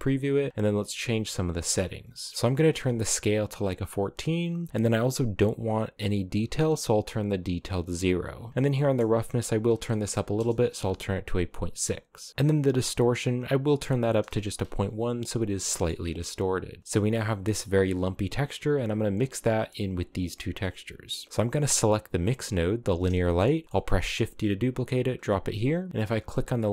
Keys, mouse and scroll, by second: 1.7 click, 6.0-11.0 drag, 12.1-14.0 drag, 15.2 scroll down 3, 15.4 middle click, 15.7 a, 15.8-16.4 scroll down 1, 16.4 b, 16.8 a, 20.2-21.9 scroll up 2, 21.9 right click, 23.4 middle click, 23.6 shift+d, 25.9-26.7 drag.